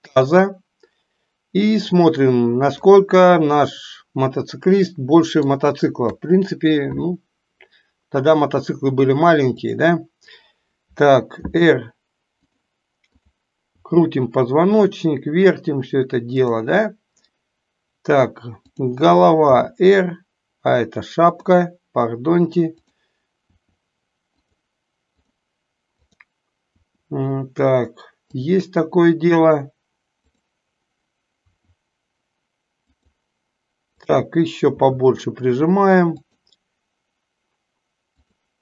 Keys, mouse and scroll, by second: 2.8-5.6 middle drag, 2.8 scroll up 1, 6.1 KP_3, 11.4 r, 13.2 click, 13.8 r, 19.6 r, 22.9 click, 23.5 r, 25.1 click, 25.9 click, 26.9 r, 31.3 r, 34.0 click, 34.7 r, 38.1 click.